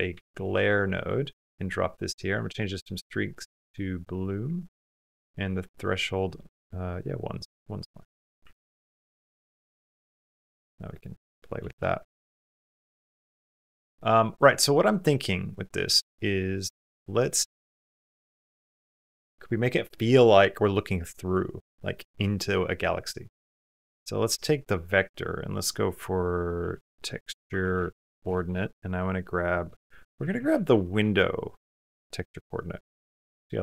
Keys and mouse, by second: 2.2-3.9 drag, 5.7-6.8 drag, 7.9 middle click, 8.4 ctrl+middle click, 9.1 middle click, 9.4 shift+middle click, 10.8 click, 12.4 middle click, 14.0 middle click, 15.0 click, 15.8 click, 16.6 click, 16.9 click, 16.9-18.9 middle drag, 24.4-33.2 drag, 29.9 Down, 30.2 Down, 30.5 Down, 33.2 typing.